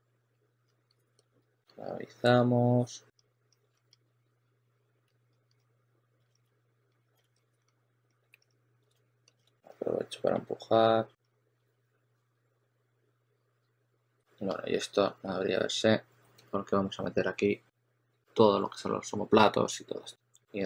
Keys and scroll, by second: 0.0-2.0 typing, 3.8 s, 5.0 s, 5.4 s, 7.7 s, 8.8 2, 9.4 2.